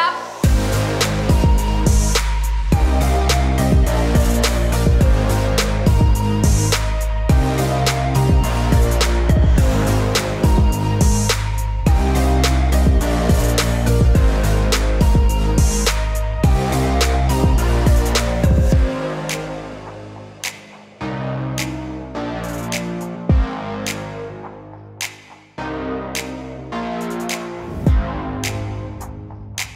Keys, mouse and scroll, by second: 0.0 shift+middle click, 0.1 middle click, 0.6 g, 1.3 click, 1.5 click, 2.0 click, 2.7 g, 2.8 z, 5.6-6.7 drag, 8.2 middle click, 8.5 ctrl+z, 8.9 click, 9.4 g, 9.4 y, 10.2 click, 10.4 click, 10.5 middle click, 11.7 middle click, 12.5 g, 12.7 x, 14.1 click, 14.2 click, 15.1 g, 15.3 z, 16.4 click, 16.5 click, 17.3 shift+click, 17.8 shift+click, 18.4 g, 18.5 y, 19.6 click, 19.6 g, 20.8 click, 21.4-22.7 typing, 22.0 click, 22.3 click, 23.6 click, 23.8 g, 24.0 z, 24.3 click, 25.0 g, 25.0 z, 25.3 click, 25.5 click, 26.4 shift+click, 27.2 shift+click, 28.3 g, 28.7 y.